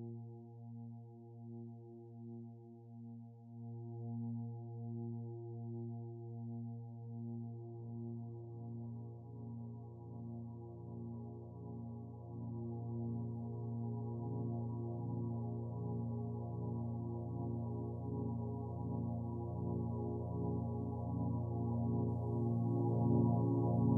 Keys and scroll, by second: 0.7 Return.